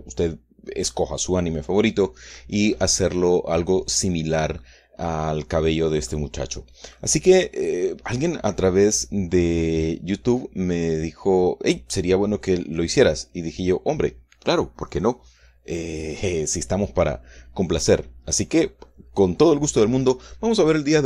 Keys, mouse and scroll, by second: 2.8-5.2 drag, 5.2 middle click, 5.4 scroll up 1, 6.1 scroll down 1, 6.5-7.6 drag, 7.6 middle click.